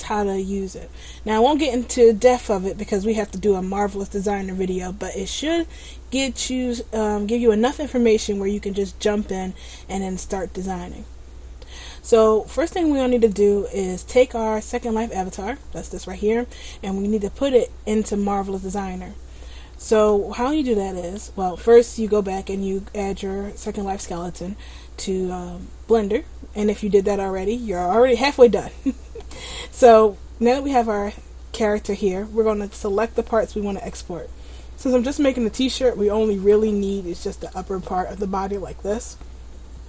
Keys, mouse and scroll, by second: 15.7-18.9 scroll down 1, 20.2 middle click, 28.2 scroll up 1, 28.5-29.4 scroll down 3, 28.8-29.4 scroll up 1, 29.4-29.9 scroll up 2, 29.9-31.7 scroll down 1, 36.6 right click, 37.3 right click.